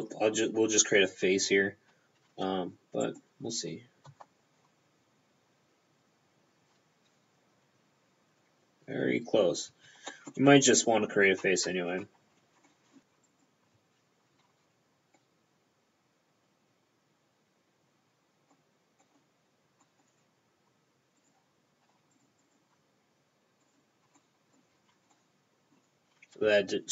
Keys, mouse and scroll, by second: 3.1 right click, 3.5 p, 9.8 p, 10.2 middle click, 10.4 p, 10.5 scroll down 1, 10.8 right click, 11.8 Tab, 12.4-12.7 scroll up 3, 12.7 middle click, 13.0 alt+right click, 13.0 click, 13.3 alt+right click, 14.5 c, 15.2 middle click, 19.1 middle click, 19.9 middle click, 21.3 right click, 22.2 shift+right click, 22.5 shift+right click, 23.7 shift+right click, 24.2 middle click, 24.8 f, 25.2 middle click.